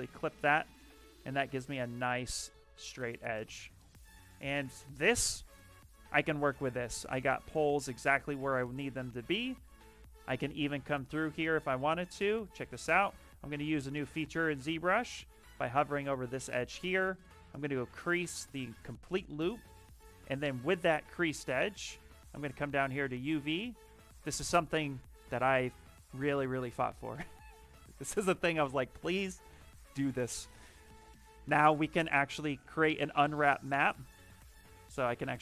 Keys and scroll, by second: 4.5 shift+f, 4.7 shift+f, 13.4-14.9 typing, 16.6 space.